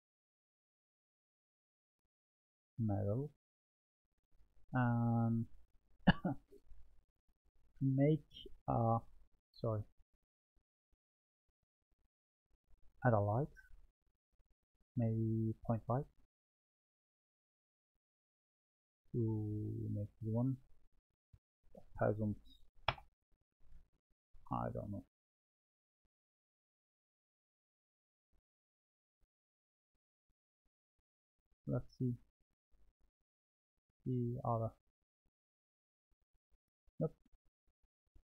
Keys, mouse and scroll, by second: 1.7-3.6 drag, 3.6-6.7 middle drag, 6.9 Tab, 7.6-9.0 scroll down 2, 9.0 Tab, 9.6 click, 12.2-16.8 drag, 18.0 click, 20.4-21.8 drag, 25.8 click, 26.4-27.1 middle drag, 30.3 click, 31.6 click, 32.2-33.8 drag, 33.8-34.8 middle drag, 37.6 click.